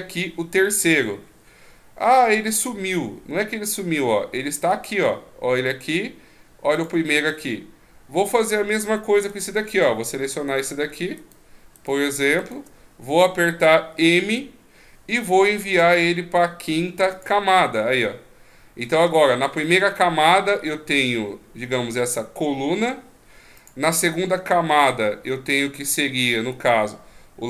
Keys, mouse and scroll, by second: 4.7 click, 6.7 click, 9.2 right click, 10.5 shift+right click, 11.2 shift+right click, 12.4 shift+right click, 14.2 m, 19.6 click, 23.6 click.